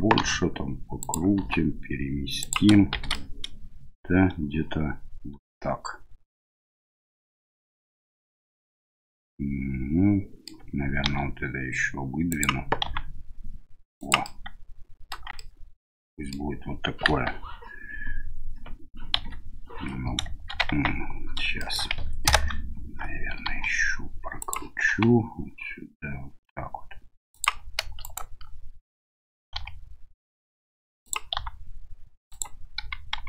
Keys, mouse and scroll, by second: 0.2 r, 1.4 g, 2.9 shift+z, 3.2-10.5 middle drag, 11.0 e, 12.8 s, 14.3 middle click, 15.1 Tab, 15.3-16.3 middle drag, 17.1 KP_1, 19.1 KP_3, 20.7 Tab, 21.6 shift+middle click, 23.4 r, 24.9 g, 28.0 alt+right click, 29.5 r, 31.3 s, 32.8 g.